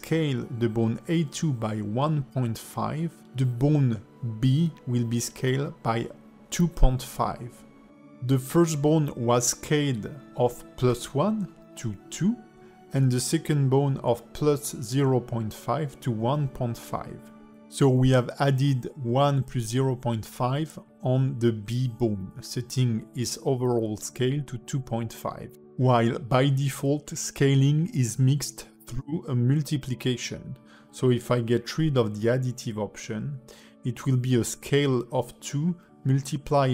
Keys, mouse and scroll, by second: 0.0 shift+middle click, 0.8 click, 1.2 click, 1.9 s, 4.1 click, 4.8 s, 6.8 shift+middle click, 8.6 click, 10.3 shift+middle click, 10.8 click, 32.9-33.7 scroll down 4, 33.7-34.2 scroll up 2, 34.6 click, 35.3 click.